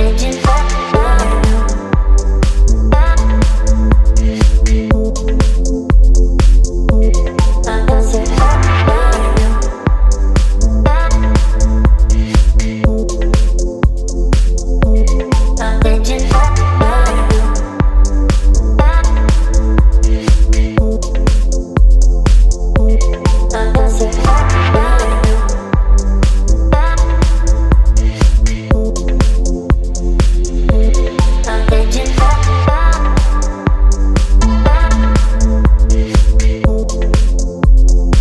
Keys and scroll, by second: 3.9 o, 30.3 v, 34.5 Return.